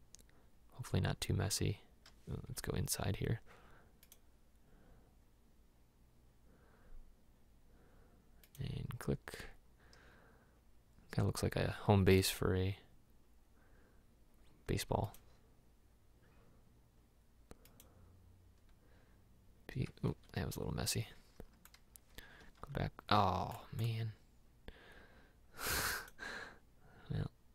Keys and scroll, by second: 2.6 Escape, 20.3 Escape.